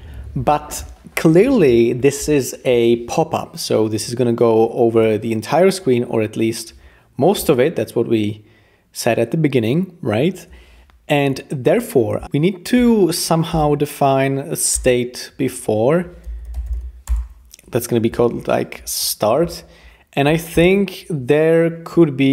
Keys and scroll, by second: 13.5 Return, 14.7 BackSpace, 16.0-17.2 typing.